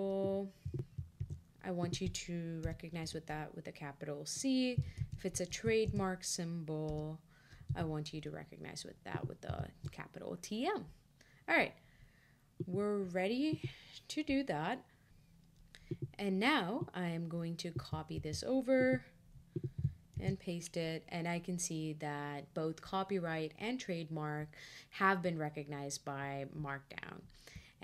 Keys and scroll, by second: 18.1 super+c, 20.1 shift+super+v.